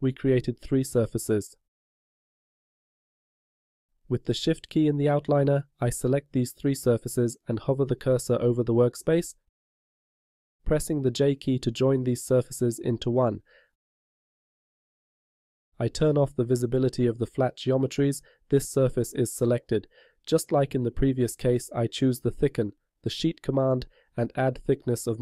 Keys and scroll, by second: 12.9 j.